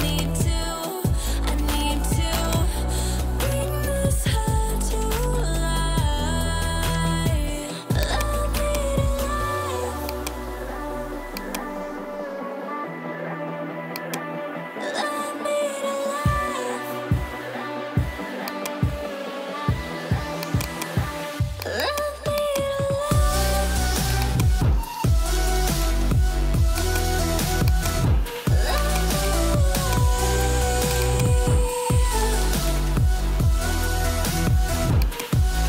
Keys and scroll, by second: 32.9-33.8 typing.